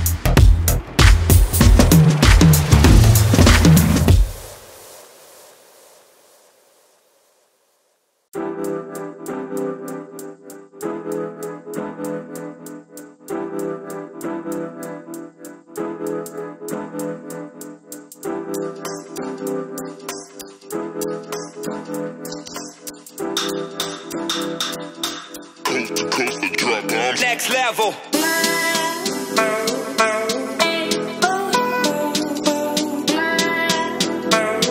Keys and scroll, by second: 0.6 ctrl+space.